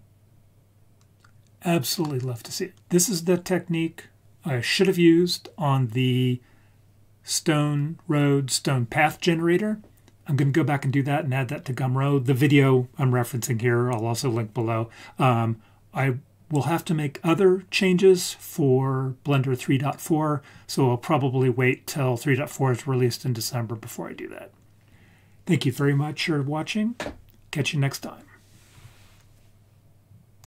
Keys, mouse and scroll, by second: 1.0 scroll down 1, 2.0-2.7 middle drag.